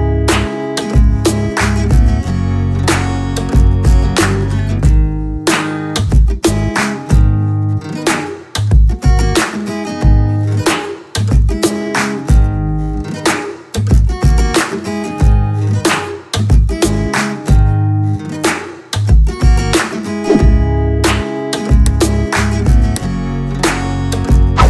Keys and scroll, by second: 0.6 ctrl+KP_Subtract, 0.9 space, 1.5 KP_Subtract, 1.5 n, 9.0 KP_Subtract, 9.0 KP_Add, 18.9 ctrl+shift+s.